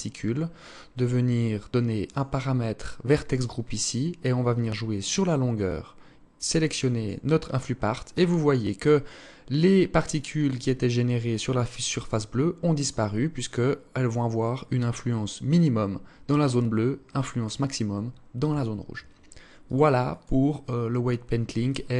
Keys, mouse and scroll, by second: 1.2 click, 1.8-2.7 scroll down 3, 4.2 click, 18.8 click.